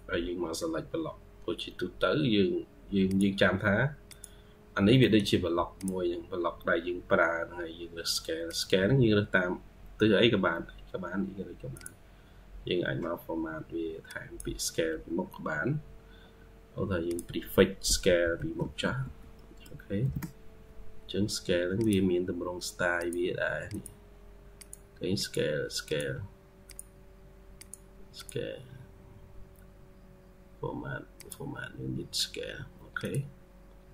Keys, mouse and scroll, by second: 4.5 scroll down 5, 4.9 middle click, 18.7 typing, 19.9 typing.